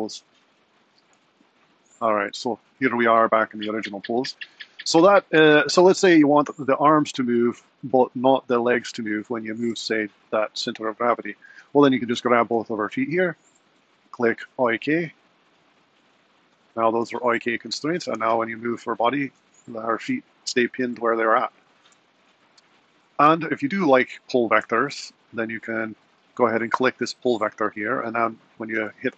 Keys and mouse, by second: 0.1 super+z, 0.4 super+z, 1.1 super+z, 2.5 shift+super+z, 7.7 click, 8.4 g, 17.6 click, 18.2 g, 23.2 super+z, 24.0 super+z.